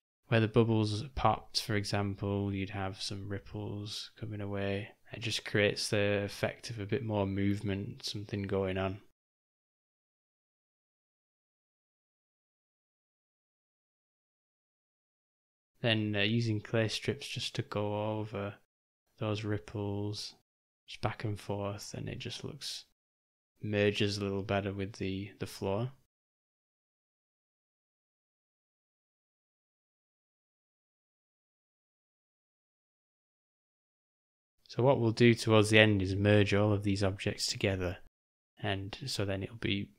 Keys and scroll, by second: 10.6 u, 11.1 ], 11.3 ], 11.5 ], 24.5 j, 28.1 ], 28.3 ], 37.0 o, 37.6 Home, 38.7 ctrl+s.